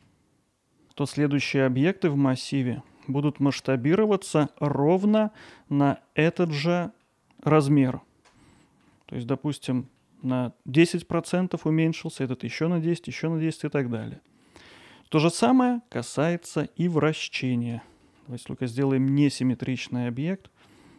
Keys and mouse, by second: 3.0-4.4 alt+middle drag, 4.7-5.5 ctrl+alt+middle drag, 6.0-6.3 alt+middle drag, 6.7 middle drag, 7.9-8.3 middle drag, 8.8 alt+middle click, 10.0 middle click, 12.0 middle drag, 13.6-14.0 middle drag, 14.4 middle click, 15.3 middle click, 16.1 click, 16.4 middle drag, 16.8 alt+middle click, 18.0 middle drag, 18.3 middle click, 19.1 middle drag, 19.5-20.6 middle drag.